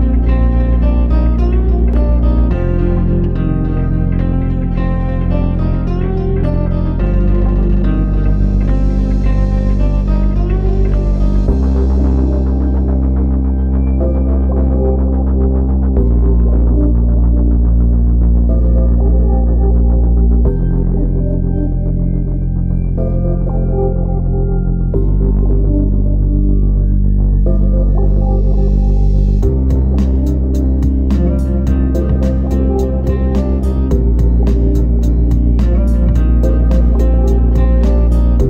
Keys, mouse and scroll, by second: 3.4 click.